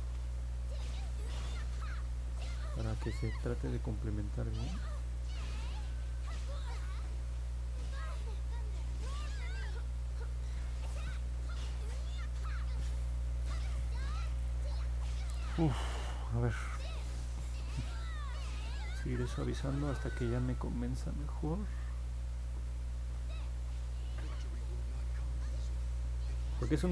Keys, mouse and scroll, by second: 1.3 click, 3.0 click, 3.7 click, 5.4 click, 6.6 click, 7.2 click, 7.5 click, 8.2 click, 12.0 click, 13.2-13.7 scroll down 2, 14.2 scroll up 1, 17.5 click, 18.0 click, 20.3 click, 21.0 click, 24.2 click, 25.8 middle click.